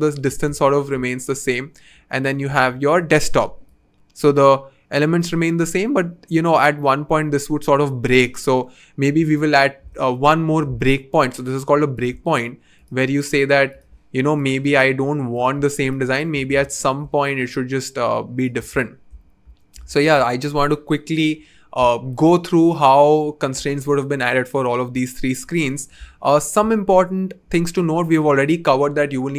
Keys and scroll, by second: 3.3 v.